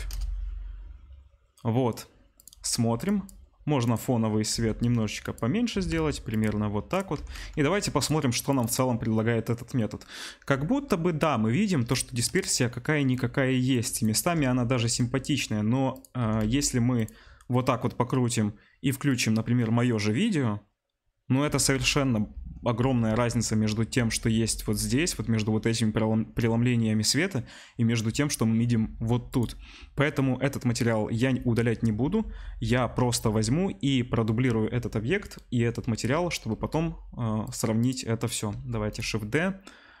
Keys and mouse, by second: 2.4-3.0 middle drag, 3.0 click, 3.9-12.5 middle drag, 4.6 s, 5.7 s, 7.2 r, 8.5 click, 13.6-40.0 middle drag, 14.7 r, 15.0 z, 16.2 r, 38.5 shift+d.